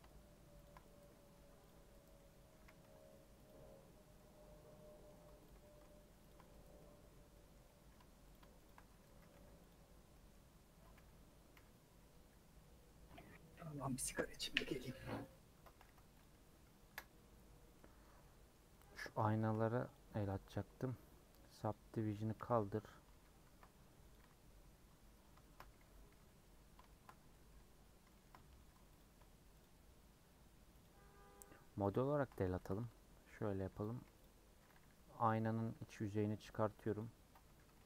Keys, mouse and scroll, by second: 2.2 middle click, 2.5 a, 3.4 u, 4.1-5.4 middle drag, 5.6 middle click, 6.8-8.3 middle drag, 8.3 alt+Left, 9.1 a, 9.7 u, 11.5 /, 12.1 /, 12.6 middle click, 12.8-14.6 scroll down 21, 13.6 /, 14.7 /, 14.9 middle click, 15.2 scroll down 1, 15.5 Tab, 15.8 h, 16.2 click, 16.8 KP_Decimal, 17.5 scroll down 2, 17.7 middle click, 18.0 scroll up 1, 18.2 middle click, 19.0 scroll up 1, 19.3 shift+middle click, 19.9 click, 20.3 click, 21.6 click, 22.3 ctrl+a, 23.1 ctrl+z, 24.0 click, 24.2 x, 25.0 scroll up 2, 25.4 shift+middle click, 26.1 /, 26.9 shift+middle click, 27.2-28.0 scroll up 2, 27.3 middle click, 27.5 Tab, 28.1 shift+middle click, 28.3 scroll up 1, 29.0 alt+click, 30.8 alt+shift+click, 31.9 alt+shift+click, 32.6 ctrl+b, 34.0 3, 34.2 click, 37.7 o.